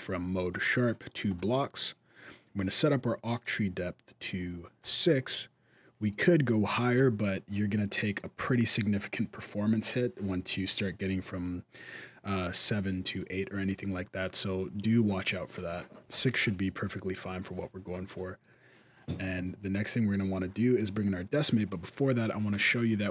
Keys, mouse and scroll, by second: 0.3 click, 2.4 middle click, 3.9 click, 4.6 click, 5.1 middle click, 5.1 scroll up 1, 6.3 middle click, 7.6 middle click, 12.2 middle click, 15.8 alt+a, 16.3 middle click, 20.3 click, 21.1 middle click, 22.0-22.5 scroll down 2, 22.3 scroll up 1, 22.5 middle click.